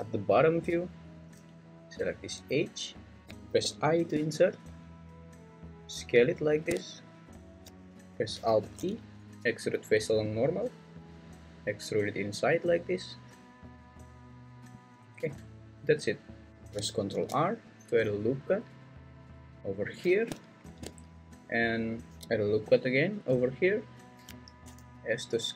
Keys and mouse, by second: 3.6 i, 6.5 click, 8.6 alt+e, 15.2 Tab, 17.1 ctrl+r, 19.7 click, 22.2 ctrl+r, 23.9 click, 24.6 s.